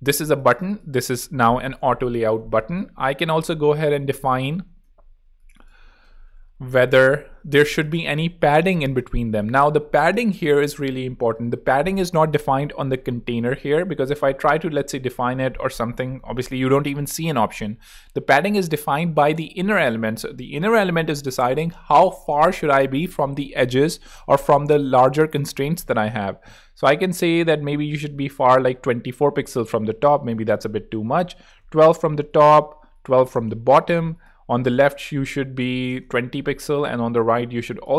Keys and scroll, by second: 1.0-2.7 typing, 4.7 super+r, 5.5-9.6 typing, 6.0 shift+super+a, 7.6 super+a, 8.1 shift+super+b, 27.8-28.6 typing, 31.2 l, 31.4 Return, 32.8-33.5 typing, 35.5-36.3 typing.